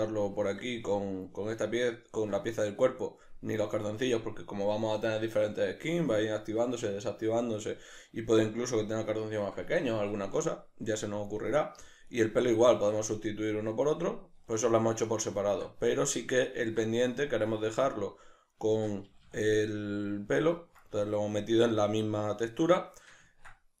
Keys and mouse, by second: 3.6-7.6 right drag, 8.0-12.1 middle drag, 12.1 right click, 12.7-21.2 ctrl+middle drag, 19.1 a, 21.2-22.4 right drag, 22.4-23.8 ctrl+middle drag.